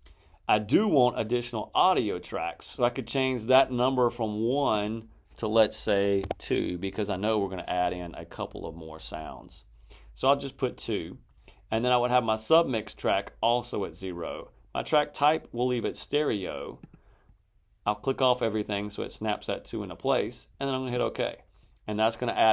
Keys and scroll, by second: 6.1 2.